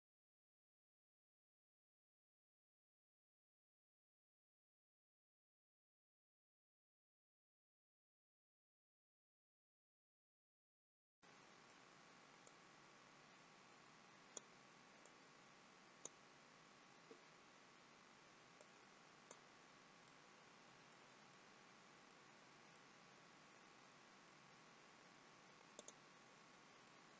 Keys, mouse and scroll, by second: 0.0-2.2 typing, 0.0 middle click, 0.0 scroll down 3, 0.0 middle click, 0.2 click, 0.6 click, 0.9 middle click, 1.3 click, 1.5 click, 1.8 middle click, 2.2 click, 2.4-2.8 scroll up 2, 2.6 middle click, 2.8 scroll down 2, 3.0 click, 3.2 middle click, 3.3 scroll up 1, 3.5 shift+click, 3.5 middle click, 3.8 g, 4.2 middle click, 4.2 click, 4.4 middle click, 4.6 click, 4.7 g, 5.0 click, 5.0 g, 5.4 middle click, 5.5 click, 5.7 g, 6.0 middle click, 6.2-6.7 scroll down 4, 6.3 middle click, 7.2 click, 7.2 scroll up 3, 7.4 middle click, 7.4 click, 8.4 scroll down 3, 8.6 click, 9.0 ctrl+z, 9.1 scroll up 3, 9.1 middle click, 9.5 scroll down 3, 9.7 click, 10.5 click, 10.9 middle click, 11.2 scroll up 2, 11.3 middle click, 12.5 click, 15.0 click, 18.6 click, 19.8 scroll down 2, 20.0 middle click, 21.3 middle click, 22.3-22.7 scroll up 3, 22.7 middle click, 25.8 click, 26.8 middle click.